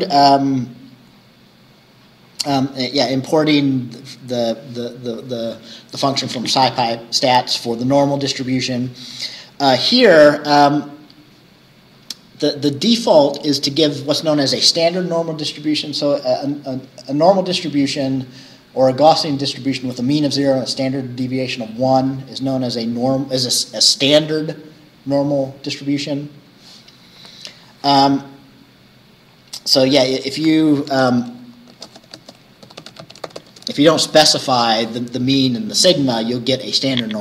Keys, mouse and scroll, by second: 1.2-1.5 scroll down 2, 2.9 click, 10.0 click, 29.1-29.5 scroll down 1, 30.3 click, 31.1 Return, 31.4 click, 31.8-33.9 typing.